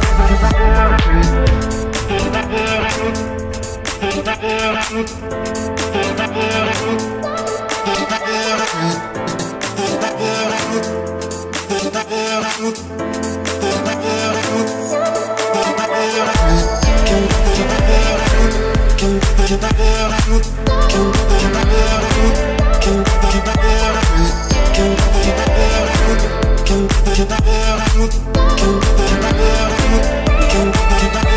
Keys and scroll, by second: 3.5 3, 6.7 Return, 10.1 Escape, 27.9 Escape.